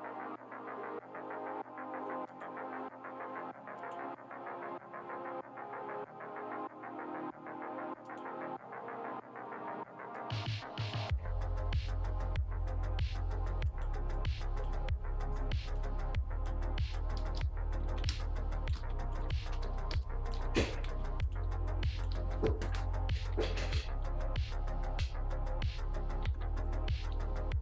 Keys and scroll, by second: 17.1-20.4 typing, 17.8 ctrl+z, 21.5 space, 22.1 b, 23.3 [, 23.4 [, 23.6 [, 24.0 ], 26.2 ctrl+z, 27.1 ctrl+z.